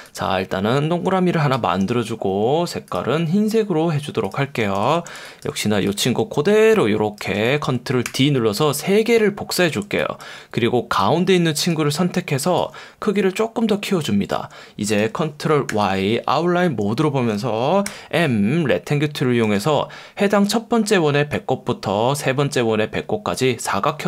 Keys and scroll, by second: 4.7 v, 5.1 space, 8.0 super+d, 9.8 space, 15.7 super+y, 17.9 m, 19.6 F1.